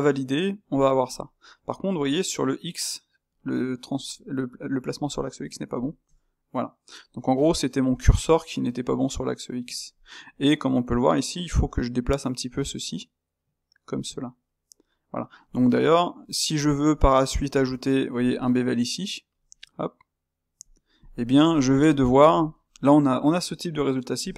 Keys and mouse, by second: 1.3-3.2 middle drag, 3.2-7.2 drag, 7.2-11.6 middle drag, 11.6 g, 14.0-18.4 middle drag, 18.4 space, 21.2-24.1 middle drag, 24.1 drag.